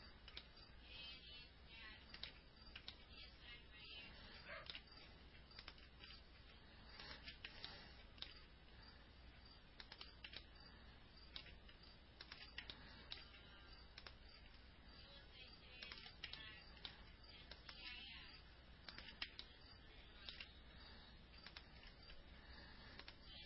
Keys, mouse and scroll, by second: 0.0 alt+middle click, 1.3-3.2 alt+middle drag, 3.9-5.6 alt+middle drag, 6.5 ctrl+click, 8.0 ctrl+click, 8.6 alt+middle click, 10.8 ctrl+click, 11.3-12.3 alt+middle drag, 13.2 ctrl+click, 13.7 alt+middle click, 14.9 ctrl+click, 16.8 ctrl+click, 17.3 alt+middle click, 18.5 ctrl+click, 19.9 ctrl+click, 20.4 alt+middle click, 22.4 ctrl+click.